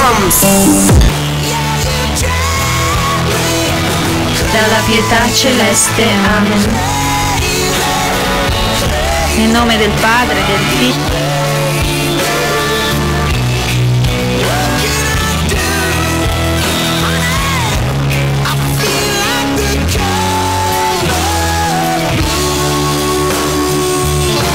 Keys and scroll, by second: 1.0 Page_Down, 11.2 Page_Down.